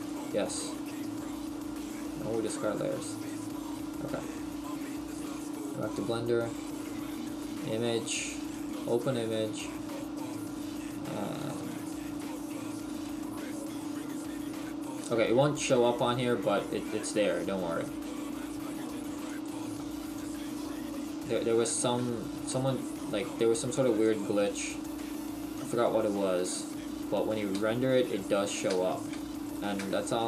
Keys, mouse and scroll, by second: 11.7 click, 15.8 shift+middle click, 15.8-16.1 scroll down 2, 19.3 click, 21.3-21.9 scroll up 1, 21.9 Tab, 21.9-22.5 scroll up 1, 22.5 middle click, 24.0 click, 26.4 Tab, 27.5 Tab, 28.2 right click, 28.7 Tab, 29.1 Tab, 29.5 right click, 29.8 Tab.